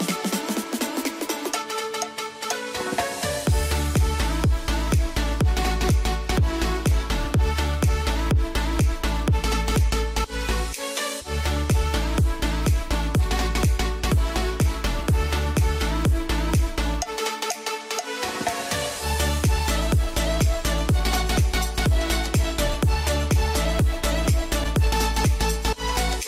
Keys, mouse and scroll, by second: 0.0-0.9 typing, 6.1 ctrl+k, 6.7 click, 8.8 shift+click, 10.4 c, 10.6-26.2 drag.